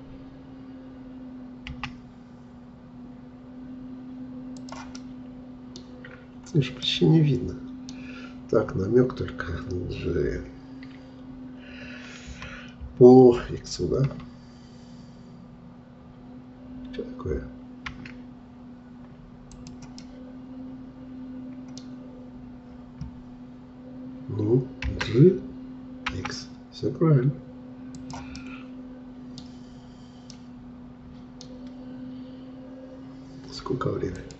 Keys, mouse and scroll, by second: 1.7 s, 4.9-6.1 middle drag, 6.1-6.9 scroll up 4, 6.9-9.8 middle drag, 12.3 g, 20.0-21.8 middle drag, 21.8-22.9 scroll down 1, 22.9-23.7 scroll down 1, 23.7-24.8 scroll down 1, 28.4-29.6 middle drag, 29.6-30.4 scroll up 3, 30.4-32.4 middle drag, 32.4-33.2 scroll down 1.